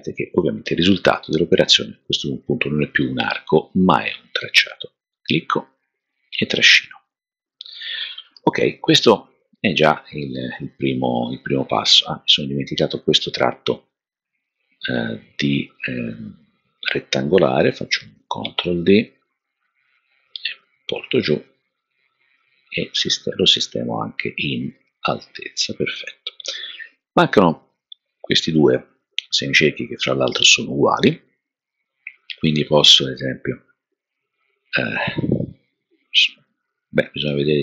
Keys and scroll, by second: 17.6 super+d.